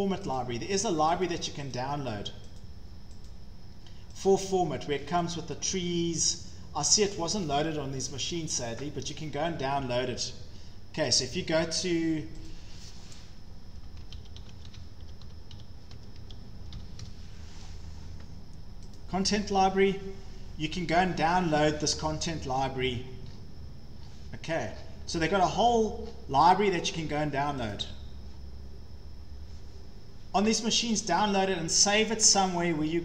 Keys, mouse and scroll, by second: 0.4 click, 1.3 click, 1.8 click, 2.6 click, 3.3 click, 4.3 click, 5.2 click, 6.3 click, 7.2 click, 8.0-8.5 scroll, 9.7 scroll down 4, 11.3 click, 12.1 scroll, 12.5 click, 13.4-17.3 typing, 19.0 click, 19.5-20.3 typing, 22.4 click, 22.4 scroll, 23.0-23.5 scroll down 13, 24.0 scroll up 4, 24.3-25.3 scroll, 26.0-27.8 scroll, 27.8 click, 27.8-28.4 scroll.